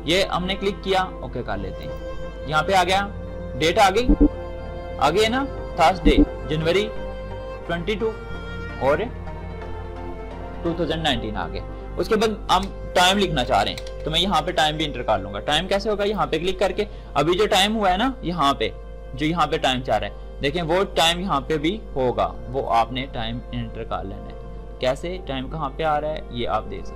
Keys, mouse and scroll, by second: 1.8 shift+click, 12.4 shift+space, 16.0 shift+click.